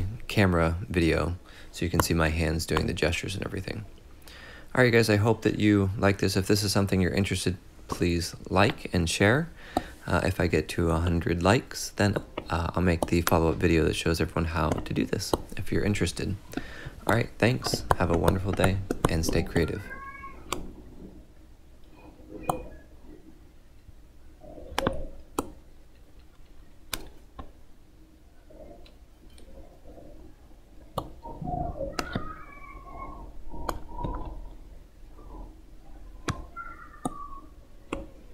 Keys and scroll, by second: 3.9 x, 22.2 x.